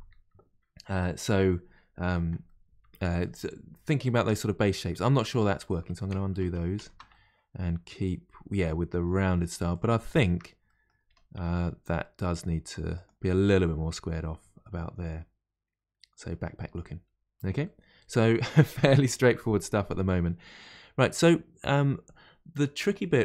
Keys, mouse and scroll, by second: 2.4-6.2 middle drag, 6.2 ctrl+z, 6.4 ctrl+z, 7.1-9.7 middle drag, 9.7 click, 10.1 shift+click, 10.6 middle click, 11.1 g, 13.3-16.3 middle drag, 16.6 scroll down 1, 17.6-21.1 middle drag, 21.1-21.6 scroll up 1.